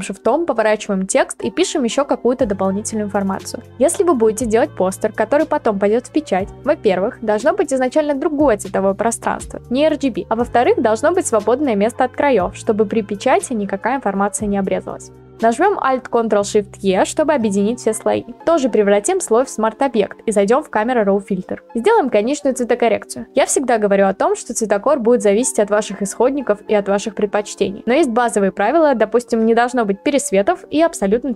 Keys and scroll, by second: 6.2 Return, 8.1-10.5 typing, 13.0-14.1 typing, 15.1 ctrl+alt+Up, 17.4 ctrl+alt+shift+e.